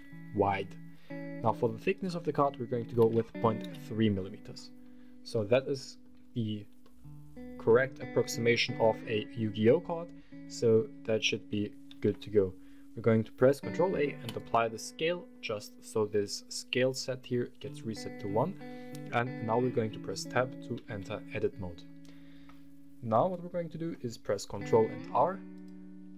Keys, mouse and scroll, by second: 0.2-1.7 scroll up 3, 1.7-3.6 drag, 3.9-4.7 scroll up 4, 5.1-5.8 middle drag, 5.9 scroll up 2, 6.6-8.5 middle drag, 11.7 ctrl+a, 14.8 middle click, 20.6 Tab, 24.7 ctrl+r.